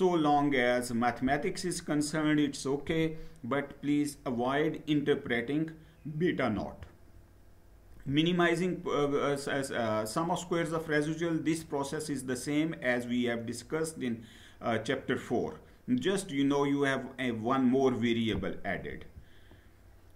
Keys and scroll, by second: 6.3 Down, 18.7 Down.